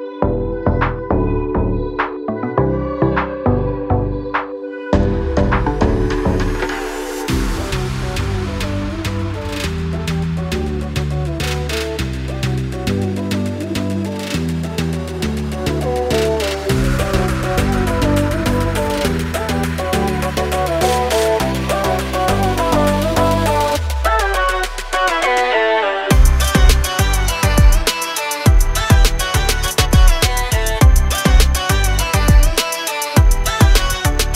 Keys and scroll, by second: 0.7 m, 1.8-2.9 typing, 4.2-6.2 typing, 7.2 Delete, 9.9 m, 11.3-12.6 typing, 14.3 l, 15.2 Escape, 16.3 space, 16.7 p, 18.2 2, 18.5 0, 18.7 Return, 20.8 space, 23.3 m, 24.7 Up, 25.3-27.1 typing, 25.6 Return, 27.2 Return, 32.0 space.